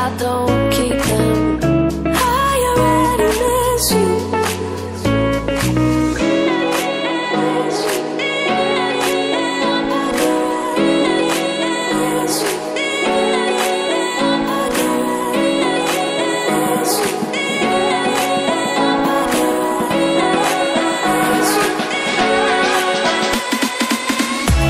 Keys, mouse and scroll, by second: 2.0 typing, 2.8 click, 3.1 ctrl+c, 3.3 typing, 4.1 click, 4.9 ctrl+double click, 5.5 ctrl+a, 8.2-8.9 typing, 11.2-12.7 typing, 13.8 click, 14.0 scroll down 1, 15.3 scroll down 1, 15.5-16.0 scroll up 1, 16.0 click, 18.9 click, 23.4 click.